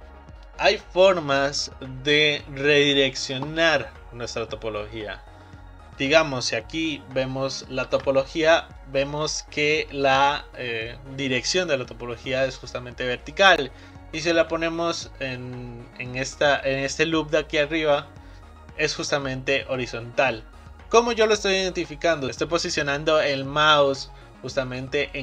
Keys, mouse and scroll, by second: 0.2-2.1 middle drag, 7.8 ctrl+r, 7.8-10.8 right drag.